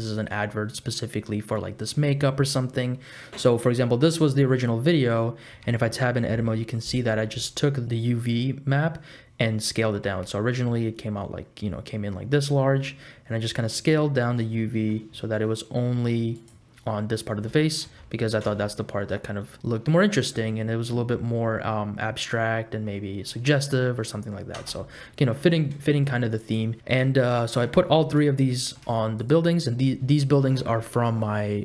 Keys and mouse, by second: 5.5 Tab, 7.1 click, 10.0 s, 17.8 Tab, 18.5 space, 24.6 space, 25.4 middle click, 26.4 click, 26.8 middle click, 27.3 shift+middle click, 27.8 middle click, 28.1 click, 28.5 shift+click, 28.6 shift+middle click.